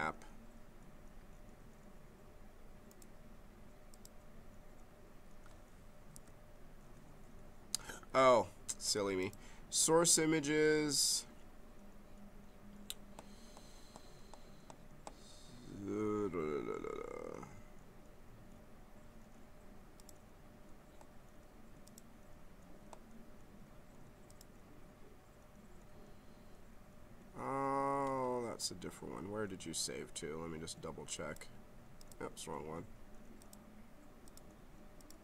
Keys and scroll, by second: 6.1 i.